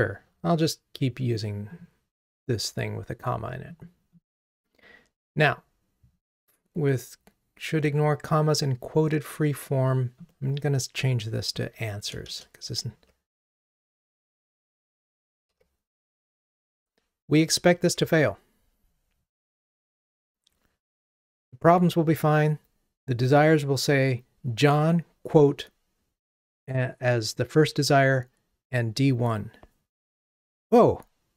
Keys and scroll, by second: 18.0 ctrl+r.